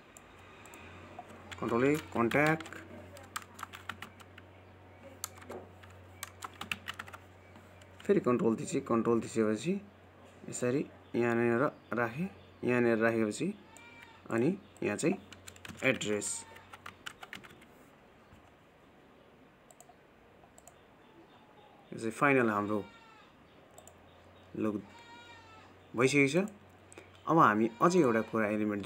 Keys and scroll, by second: 2.5 ctrl+a.